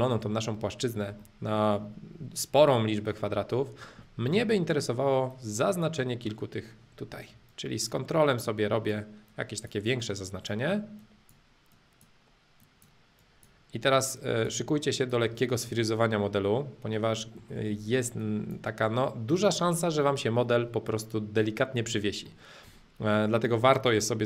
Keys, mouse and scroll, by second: 2.6-4.6 middle drag, 5.2-6.8 drag, 6.8-7.4 scroll up 2, 7.5-9.5 ctrl+drag, 10.2-12.2 ctrl+drag, 12.6-14.6 ctrl+drag, 14.8 ctrl+click, 15.6-16.6 middle drag, 16.6-17.2 scroll up 2, 17.2 middle click, 18.2-20.2 ctrl+drag, 20.8-22.4 ctrl+drag, 21.8-22.4 scroll up 2, 22.4-24.2 middle drag.